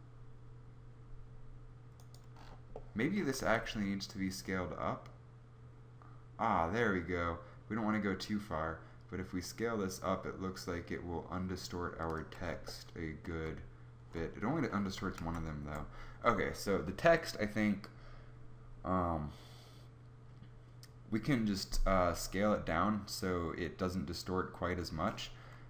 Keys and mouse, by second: 3.5 s, 15.2 ctrl+z, 17.1 Tab.